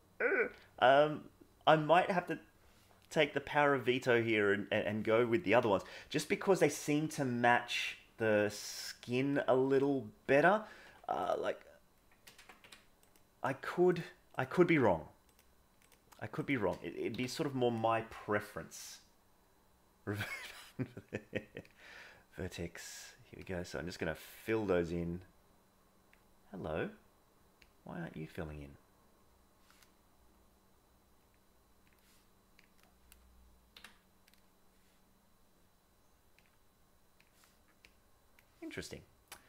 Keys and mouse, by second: 4.2-4.8 drag, 9.3-10.9 middle drag, 10.8 Tab, 11.3-12.3 drag, 12.2 ctrl+z, 12.6 Tab, 12.9 click, 13.9 shift+drag, 14.3 shift+click, 15.2 click, 15.8 shift+drag, 16.4 shift+click, 21.0-21.7 drag, 23.4 click, 24.5-26.1 drag, 27.6 click, 31.1 click, 36.4-37.3 drag, 37.9 click.